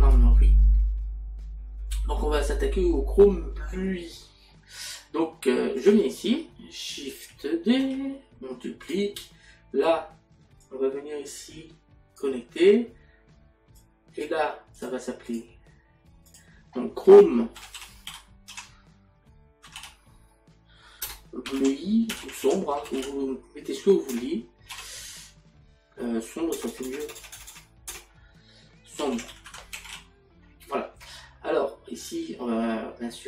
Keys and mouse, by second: 6.2 click, 10.7 click, 20.3 typing, 22.2 typing, 24.1 BackSpace, 26.5 BackSpace.